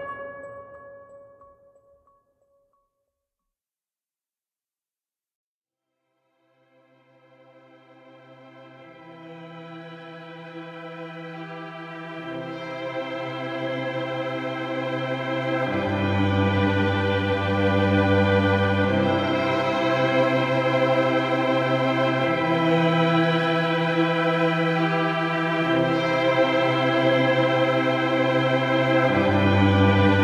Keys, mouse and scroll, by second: 0.6 click, 0.9-2.8 middle drag, 3.3 ctrl+Tab, 3.9 2, 19.7 x, 22.2 click, 25.6 click, 28.2 x, 29.5 click.